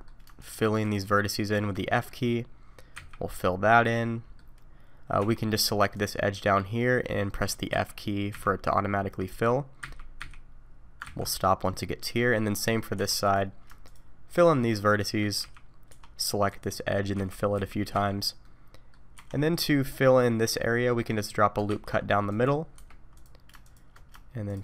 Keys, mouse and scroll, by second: 0.4 shift+click, 0.8 shift+click, 1.4 click, 1.8 middle click, 2.9 f, 3.4 middle click, 5.2 2, 5.9 click, 7.7 f, 8.3 f, 9.8 f, 10.2 f, 11.0 ctrl+z, 12.0 middle click, 13.0 1, 13.2 click, 13.9 shift+click, 14.3 click, 14.9 shift+click, 15.4 f, 15.9 2, 16.5 click, 17.1 f, 17.5 f, 18.0 f, 18.4 middle click, 19.1 1, 19.3 scroll up 2, 20.5-20.9 scroll down 2, 20.8 middle click, 21.6 ctrl+r, 23.1 click, 23.6 shift+click, 24.5 click.